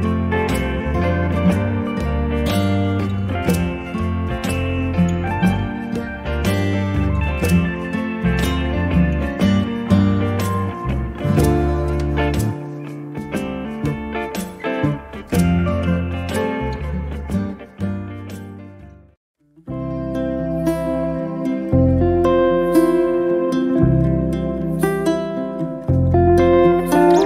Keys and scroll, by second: 10.6 p, 11.8 2, 12.3 Return, 14.1 Escape.